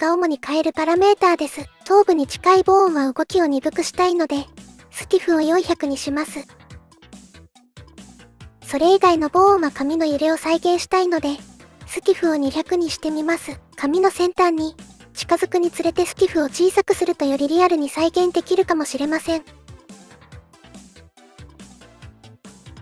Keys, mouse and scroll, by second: 1.7 click, 6.4 click, 7.4 click, 8.4 click, 10.5 shift+click, 11.4 shift+click, 12.6 shift+click, 15.8 shift+click, 16.9-19.9 drag, 19.1 KP_0.